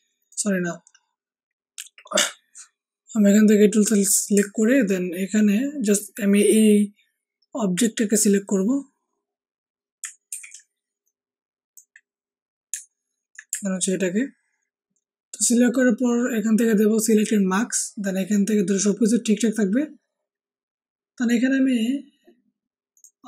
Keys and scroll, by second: 10.2 ctrl+d.